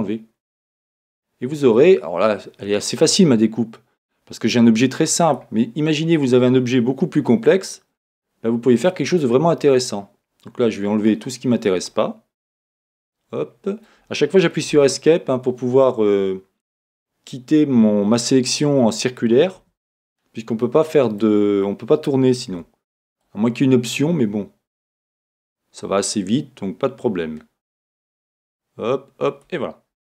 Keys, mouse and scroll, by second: 12.6 Escape, 13.2-22.5 middle drag, 19.7 Escape.